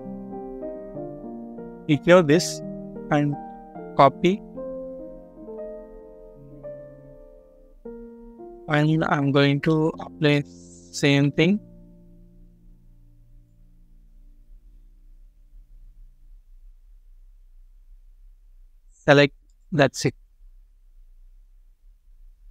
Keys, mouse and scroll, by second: 1.2 scroll up 1, 2.0 typing, 3.7-5.1 typing, 7.2-8.6 scroll up 1, 9.5 middle click, 21.7 double click.